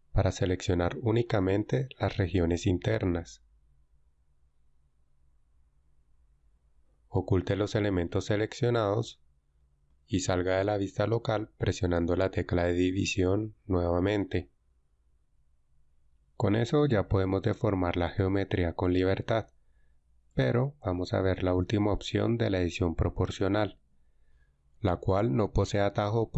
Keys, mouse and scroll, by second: 3.7 l, 5.7 l, 9.1 h, 13.7 KP_Divide.